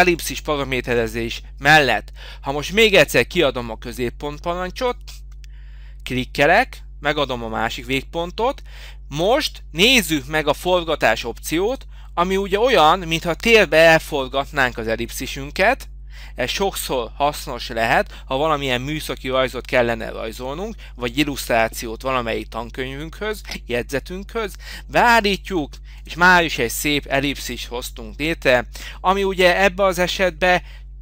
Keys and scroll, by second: 0.2 Delete.